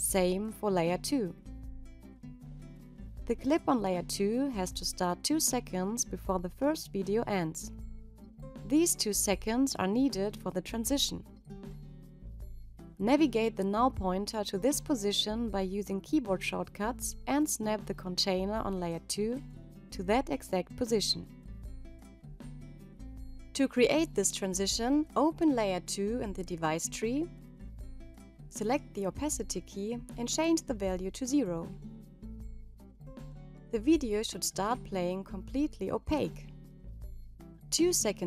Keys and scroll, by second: 12.1 ctrl+Right, 17.5 -.